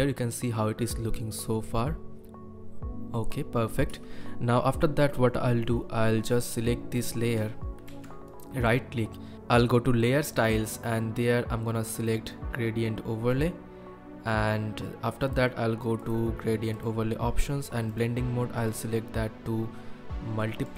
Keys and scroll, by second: 3.9 space, 7.9 ctrl+F1.